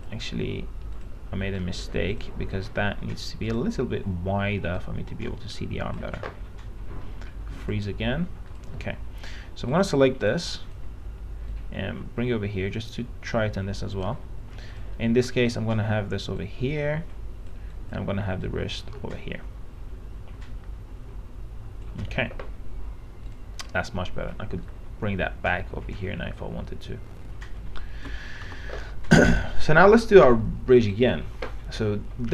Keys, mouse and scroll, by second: 0.6-14.3 drag, 17.4-28.7 drag, 28.7 p, 29.7 alt+middle click, 31.1 click.